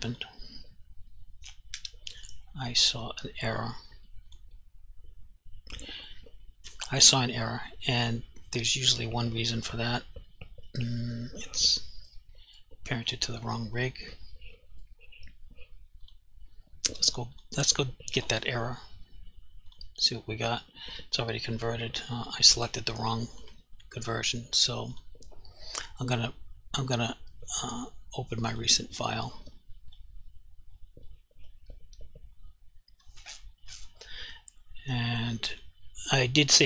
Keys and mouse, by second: 0.2 click, 1.8 Delete, 4.3 click, 16.1 click, 22.5 click, 22.7 g, 23.5 right click, 25.0 click, 28.6 click, 35.6 click.